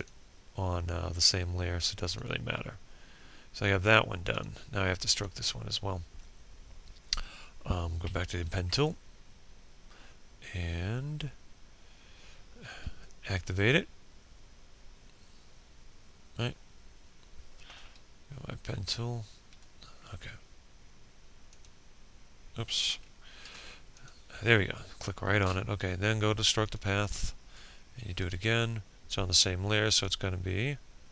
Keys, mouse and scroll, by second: 5.1 b, 16.1 b, 18.1 click, 20.1 ctrl+z, 20.6-21.7 drag, 29.5 p.